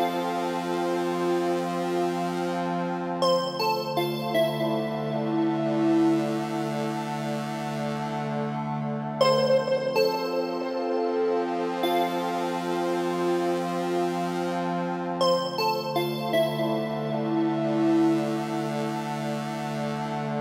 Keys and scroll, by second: 19.0 Return.